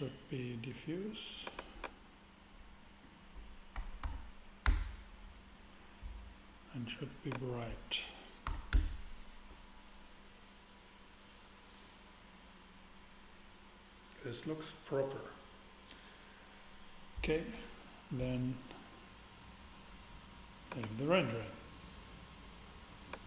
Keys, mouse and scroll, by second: 1.1 middle click, 4.0 5, 4.6 Return, 7.3-8.9 drag, 8.4 6, 8.7 Return, 20.7-22.5 drag, 23.1 click.